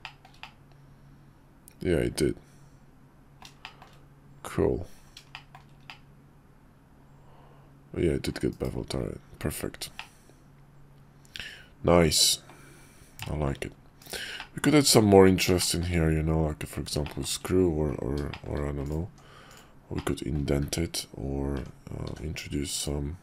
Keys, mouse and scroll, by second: 0.0 shift+middle click, 0.4-3.4 middle drag, 3.6 shift+middle click, 5.3 shift+middle click, 5.9-8.2 middle drag, 8.5 /, 10.0-12.5 drag, 13.2 middle drag, 14.0 /, 14.4 middle click, 14.8 `, 15.6 shift+middle drag, 17.0 shift+middle click, 18.3 shift+click, 19.1 Tab, 19.5 click, 20.0 middle click, 20.6 `, 21.6 Tab, 22.1 d.